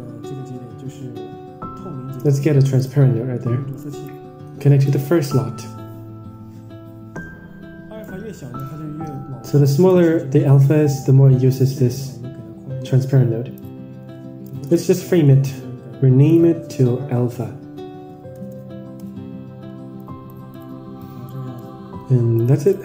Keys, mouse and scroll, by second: 3.6-5.1 drag, 7.9-8.5 drag, 9.7 click, 11.7 drag, 13.1-13.8 drag, 14.6 ctrl+i, 15.4-19.5 right drag, 19.9 click, 20.4 click, 20.9 click, 21.6-22.6 drag.